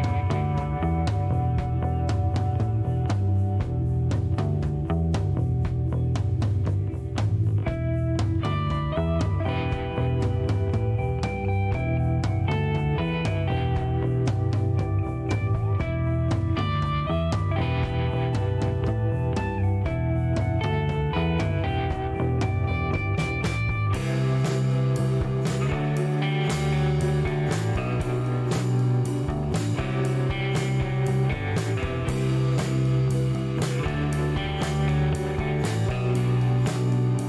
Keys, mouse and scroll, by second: 0.5 click, 3.0 KP_3, 3.2 KP_5, 6.0 click, 6.8 scroll down 1, 7.4 shift+right click, 8.1 shift+middle click, 8.5 shift+right click, 9.2 shift+middle click, 10.6 middle click, 11.4 shift+right click, 15.2-15.7 shift+scroll down 2, 15.9 middle click, 16.3 shift+right click, 17.3 shift+middle click, 17.9 scroll up 1, 18.6 click, 19.3 middle click, 19.7 shift+right click, 20.7 scroll up 2, 21.1 middle click, 21.5 scroll up 2, 23.8 click, 24.9 scroll up 2, 25.2 middle click, 27.7 click, 30.1 click, 31.9 click, 32.4 right click, 33.5 click, 34.8 click, 37.0 click.